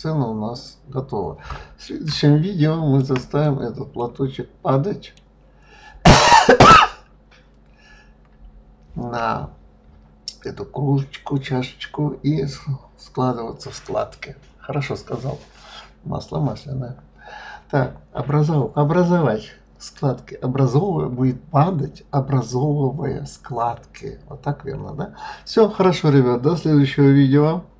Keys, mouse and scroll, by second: 0.7-2.0 scroll up 4, 2.0-4.0 shift+middle drag, 4.0-4.5 scroll down 3, 4.5-7.5 middle drag.